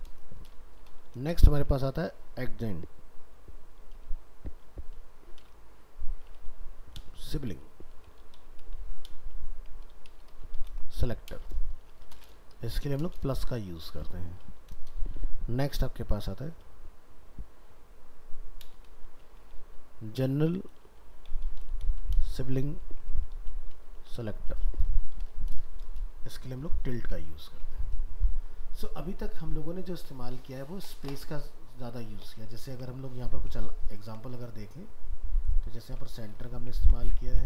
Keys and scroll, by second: 27.4 ctrl+s, 32.6 ctrl+s, 35.8 ctrl+w.